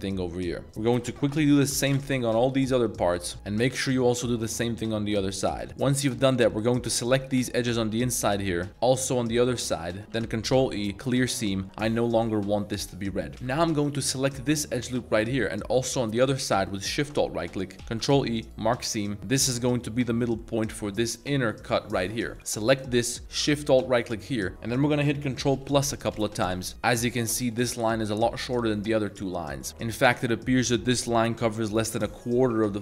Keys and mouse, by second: 0.5 middle click, 0.6 ctrl+shift+z, 1.0 s, 1.5 7, 1.7 2, 1.9 Return, 2.5 shift+middle click, 2.9 click, 3.1 click, 3.3-4.4 middle drag, 5.5 click, 5.8 shift+z, 5.9 shift+click, 6.5 shift+click, 7.3 shift+click, 7.6 shift+click, 8.7 z, 9.6 shift+click, 10.1 ctrl+e, 11.5 middle click, 11.8 a, 12.9 middle click, 13.3 2, 13.5 a, 13.9 alt+click, 15.3-16.2 middle drag, 16.9 alt+shift+click, 17.4 middle click, 18.0 ctrl+e, 19.2 a, 19.3-20.4 middle drag, 20.8 3, 22.3 alt+2, 22.7 alt+click, 23.0 middle click, 23.8 alt+shift+click, 24.3 middle click, 24.5 ctrl+z, 25.6 ctrl+KP_Add, 25.9 ctrl+KP_Add, 26.2 ctrl+KP_Add, 26.5 ctrl+KP_Add, 29.6 middle click.